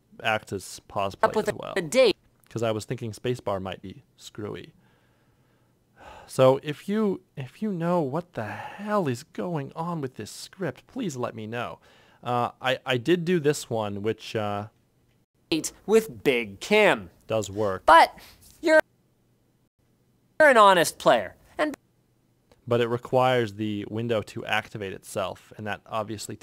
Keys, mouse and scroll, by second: 1.7 8, 3.2 ctrl+F1, 3.6 ctrl+F2, 3.9 ctrl+F6, 15.0 ctrl+F6, 15.0 F9, 19.6 ctrl+F6, 19.6 F9, 21.3 F9, 23.1 click, 23.2 F9, 23.6 F9, 24.4 F9, 25.1 F9, 25.7 click.